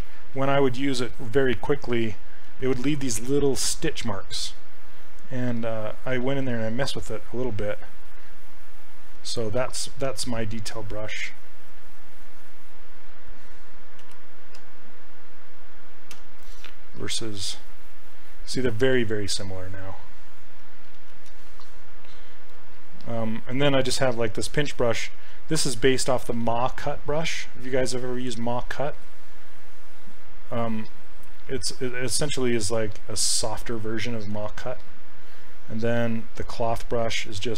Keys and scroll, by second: 2.5 ctrl+z, 6.4 s, 10.4 ctrl+z, 14.1 b, 14.6 d, 16.2 s, 21.0 ctrl+z, 21.3 ctrl+z, 25.2 s, 26.4 s, 33.7 s, 34.4 ctrl+z, 36.7 s.